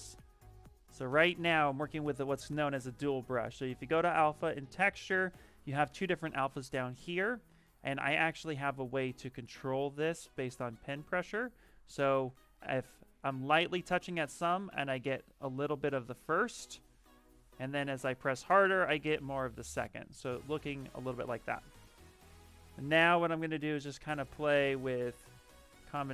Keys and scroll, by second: 1.8 ctrl+z, 20.8 ctrl+z.